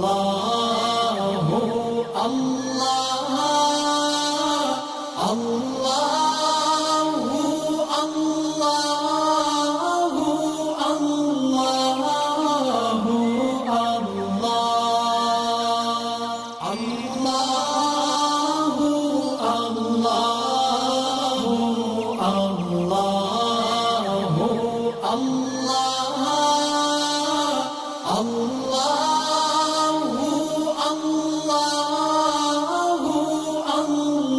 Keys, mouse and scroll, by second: 1.6 click, 6.0 space, 6.0 click, 7.1-8.0 alt+shift+drag, 8.8-9.2 alt+scroll up 2, 9.2-9.9 drag, 10.3 alt+scroll up 2, 11.1 click, 11.7 ctrl+shift+], 14.0-18.3 drag, 19.7 alt+scroll down 1, 19.8 space, 19.9-22.1 drag, 26.1 alt+scroll down 1, 27.1 click, 28.6 click, 30.6-30.9 scroll up 1, 30.9-31.6 shift+click, 31.9 alt+scroll up 1, 32.7-33.2 drag.